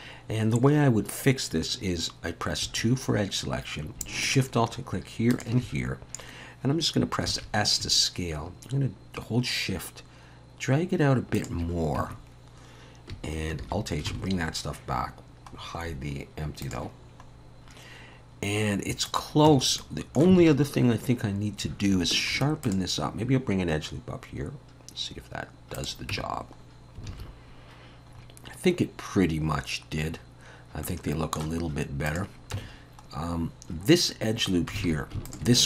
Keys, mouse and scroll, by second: 0.9-1.3 scroll up 1, 2.6 2, 4.2 alt+shift+click, 7.3 s, 12.0 Tab, 13.6 alt+h, 14.1 alt+a, 14.1 alt+s, 14.5-15.0 scroll down 2, 15.6-16.6 scroll down 5, 16.6 click, 16.6-17.2 scroll down 2, 18.3 scroll up 2, 19.1 click, 19.5 Tab, 19.8 middle click, 20.4 alt+a, 22.3 ctrl+r, 26.1 Tab, 26.6-27.0 scroll down 2, 27.1 alt+a, 27.4-28.1 scroll down 2, 28.1-29.2 scroll up 2, 30.8 middle click, 32.1 click, 32.5 Tab, 33.1-34.0 scroll up 1, 34.8 alt+a, 35.3 alt+shift+click.